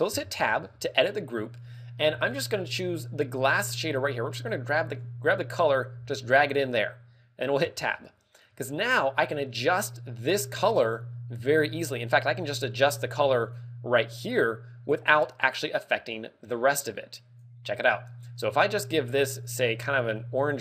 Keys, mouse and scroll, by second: 0.0 Tab, 0.6-1.6 scroll down 5, 4.9 click, 7.8 Tab, 8.1-8.6 scroll up 5, 13.3 click, 14.3 click.